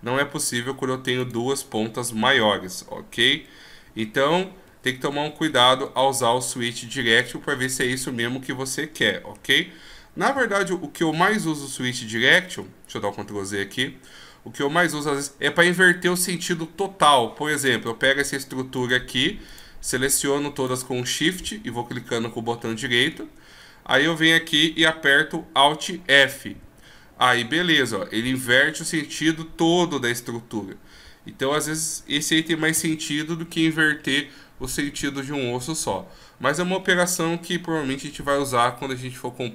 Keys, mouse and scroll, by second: 1.2 right click, 4.7 ctrl+z, 5.1 ctrl+z, 6.2 scroll down 2, 9.0 scroll down 2, 10.3 ctrl+z, 11.1 ctrl+z, 12.1 ctrl+z, 12.4 ctrl+z, 13.8 scroll down 1, 16.4 scroll down 2, 17.7 right click, 18.8 shift+right click, 19.5 right click, 22.7-24.0 shift+scroll up 8, 26.6 alt+f, 32.7 ctrl+z.